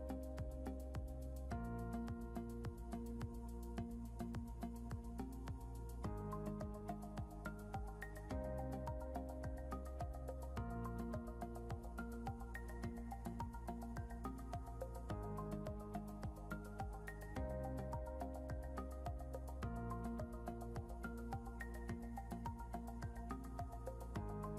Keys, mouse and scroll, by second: 1.0 ctrl+k, 2.4 click, 5.5 scroll up 1, 6.8 click, 9.6 click, 12.2 scroll down 1, 13.0 click, 13.4 scroll up 1, 14.2 click, 15.8 click, 18.7 click, 19.1 scroll down 1, 19.6 click.